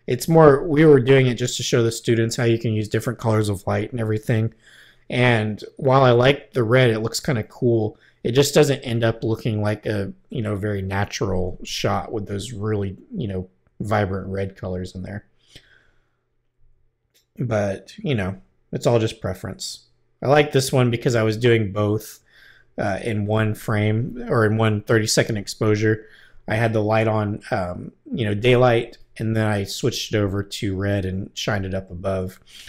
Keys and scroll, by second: 13.7 Right, 18.2 Right.